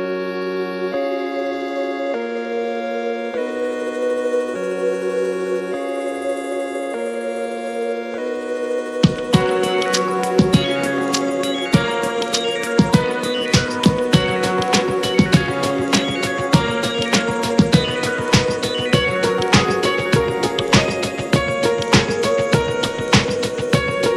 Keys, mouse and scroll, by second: 0.7 drag, 1.2 shift+middle click, 1.7 click, 1.9 F4, 18.9-24.1 drag.